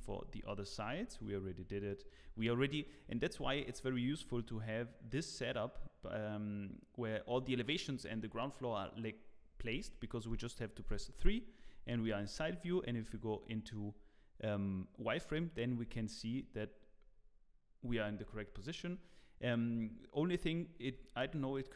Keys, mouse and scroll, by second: 0.1 scroll up 1, 0.4 shift+middle click, 2.5 shift+middle click, 2.5 scroll down 4, 2.5 z, 2.6 scroll down 3, 2.8 middle click, 3.4 z, 4.0-4.4 scroll down 4, 4.3 middle click, 5.0 middle click, 10.1 middle click, 10.9 KP_3, 11.7-12.2 scroll up 8, 21.1 middle click.